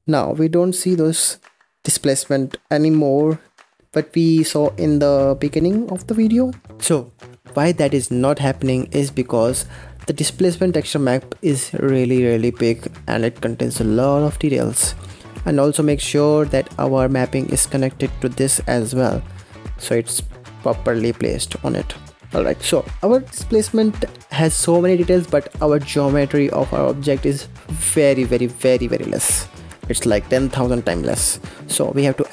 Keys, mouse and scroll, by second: 0.6-1.8 middle drag, 1.8-2.1 scroll up 2, 2.1-2.5 scroll down 1, 2.5-3.8 middle drag, 3.8-4.2 scroll up 1, 4.2-6.4 middle drag, 6.4 scroll down 2, 8.3-10.4 middle drag, 10.4-11.3 scroll up 4, 11.3 middle click, 12.0 scroll up 1, 12.6 scroll down 1, 13.3-14.6 middle drag, 14.6-15.2 scroll down 15, 15.2-15.6 middle drag, 15.6-15.9 scroll up 4, 15.9-16.6 scroll down 7, 16.2 middle click, 16.6 scroll up 2, 17.4 click, 19.4 scroll down 4, 20.2 scroll up 2, 20.6-22.1 middle drag, 22.2 scroll up 1, 23.9-25.1 middle drag, 25.1 click, 25.4 Tab, 25.7-26.9 scroll down 2, 26.9-28.8 middle drag, 28.8-29.2 scroll up 3, 29.2-31.0 scroll down 3, 31.0 Tab, 31.6 scroll up 1.